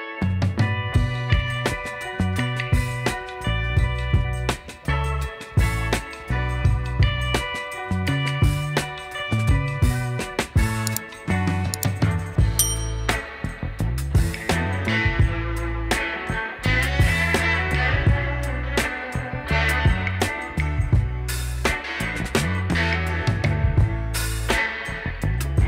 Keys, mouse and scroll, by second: 0.9 shift+click, 4.9-5.2 alt+scroll down 1, 5.3 alt+middle click, 9.5 shift+click, 11.2 alt+middle click.